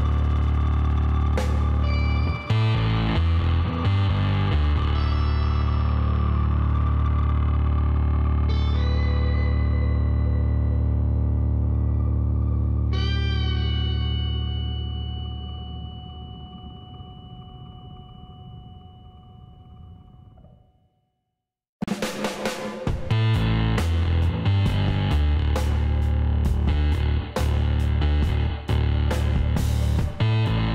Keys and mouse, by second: 0.9-3.5 drag, 2.7 ctrl+e, 5.2 Tab, 5.4 click, 7.7 Tab, 10.0 KP_3, 13.8-15.2 middle drag, 15.2-18.5 drag, 18.5-20.1 middle drag, 18.9 a, 22.0-24.1 drag, 23.3 x, 25.4 click, 25.6-27.1 middle drag, 27.6-29.7 drag, 29.4 g.